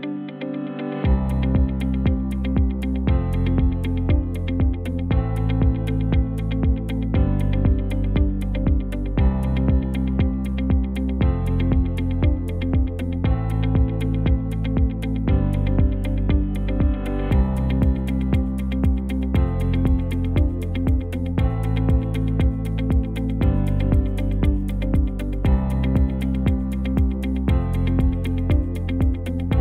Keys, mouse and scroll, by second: 12.1 i, 15.1 ctrl+t, 28.8 i.